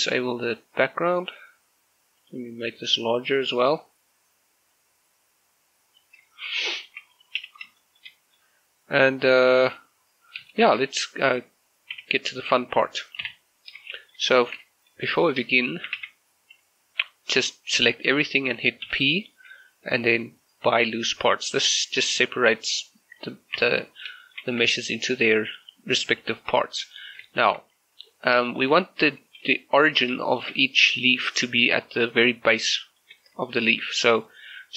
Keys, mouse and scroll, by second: 0.1 click, 4.8-6.8 drag, 6.8 shift+middle click, 7.4 n, 7.8 shift+middle click, 8.4-10.8 middle drag, 12.0 z, 14.0 shift+middle click, 14.6 Tab, 15.2 shift+middle click, 15.8 a, 16.0 a, 18.9 p, 21.7 click, 23.6 Tab, 24.0 scroll down 1, 24.3 shift+middle click, 25.6 right click, 26.3 r, 27.0 right click, 27.4 shift+middle click, 27.6-28.4 scroll up 1, 28.5 shift+middle click, 30.3 shift+middle click, 31.4-32.6 scroll up 1, 32.6 click, 32.9 shift+middle click, 33.2 scroll up 1, 33.5 shift+middle click.